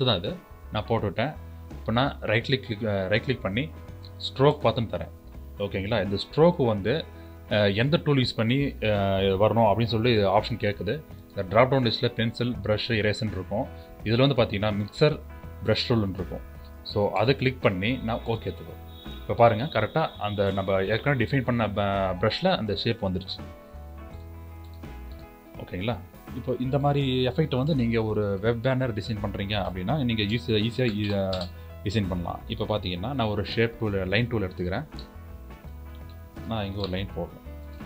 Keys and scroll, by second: 30.1 ctrl+shift+n, 36.2 u.